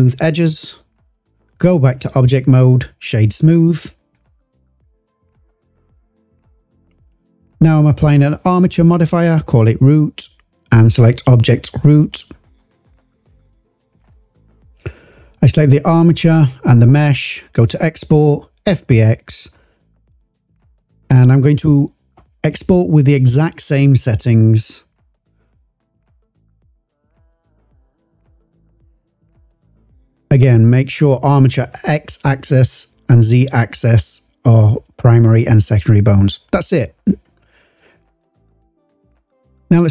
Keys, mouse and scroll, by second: 1.4-2.0 drag, 2.5 right click, 6.5-7.4 drag, 7.9-10.1 drag, 9.0 o, 10.4 click, 14.6 click, 15.2 click, 16.1 shift+click, 17.2-18.8 drag.